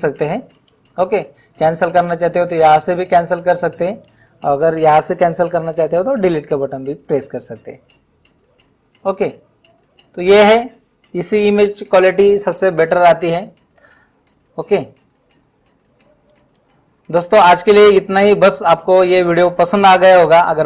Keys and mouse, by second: 0.6 right click, 3.9 click.